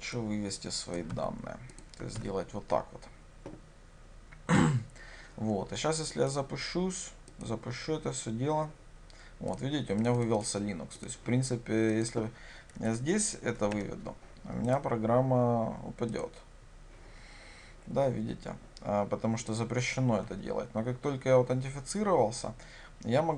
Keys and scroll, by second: 1.2 ctrl+c, 2.2 ctrl+v, 7.5 ctrl+shift+F10, 16.2 ctrl+shift+F10.